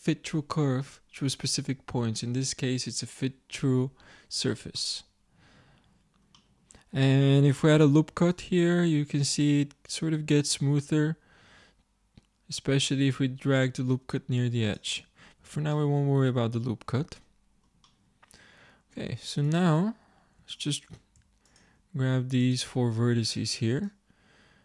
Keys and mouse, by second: 4.9-7.7 middle drag, 7.7 ctrl+r, 15.3 ctrl+z, 20.0-24.6 drag.